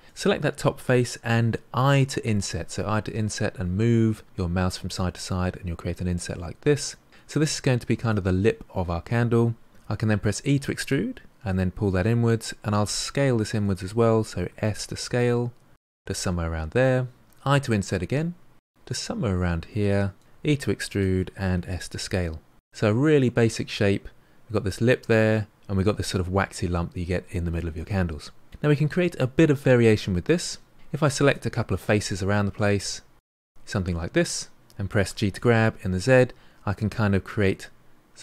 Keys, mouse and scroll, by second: 0.0 click, 1.7 i, 10.2 e, 14.4 s, 15.8-17.2 middle drag, 17.2 i, 20.2 e, 21.1 s, 22.6-25.6 middle drag, 31.0 click, 31.5 shift+click, 32.3 shift+click, 33.6 shift+click, 35.0 g, 37.6-38.2 middle drag.